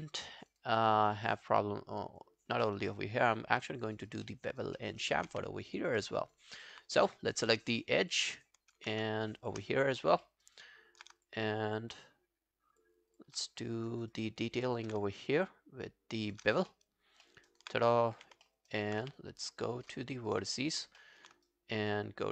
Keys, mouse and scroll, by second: 0.4 alt+right click, 0.6 alt+click, 1.0 alt+right click, 1.3 alt+middle click, 1.6 alt+click, 2.6 alt+middle click, 2.8 alt+right click, 3.0 alt+click, 3.4 alt+scroll down 1, 3.6 alt+click, 4.0 alt+right click, 4.3 alt+middle click, 4.5 alt+right click, 4.8 alt+middle click, 5.0 alt+right click, 5.3 q, 5.6 alt+click, 6.0 alt+middle click, 6.2 alt+right click, 6.4 alt+click, 7.0 right click, 8.2 double click, 8.5 alt+click, 9.3 shift+click, 9.5 shift+click, 9.7 alt+click, 10.2 alt+middle click, 10.5 alt+right click, 11.2 shift+click, 11.7 shift+click, 12.7 shift+click, 13.1 shift+click, 13.4 scroll down 2, 13.6 alt+click, 13.9 alt+right click, 14.1 alt+click, 14.5 alt+middle click, 14.7 alt+right click, 15.1 shift+right click, 15.9 shift+right click, 16.7 alt+middle click, 17.5 alt+middle click, 17.5 alt+right click, 18.2 w, 18.5 alt+middle click, 18.7 alt+right click, 19.0 q, 19.2 right click, 20.6 shift+click, 21.0 alt+middle click, 21.5 shift+right click.